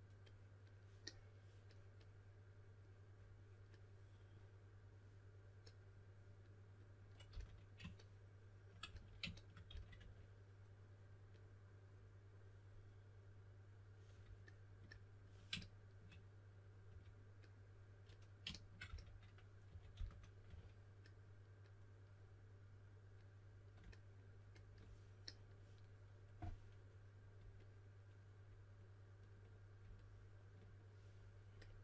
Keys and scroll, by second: 7.2 typing, 8.8 s, 9.9 typing, 16.8 3, 18.8-20.9 typing.